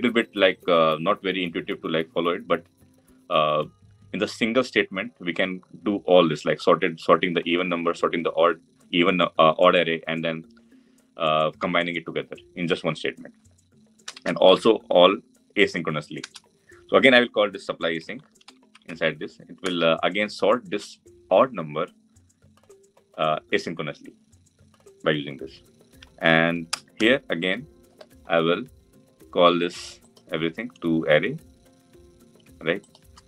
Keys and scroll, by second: 16.0 Return.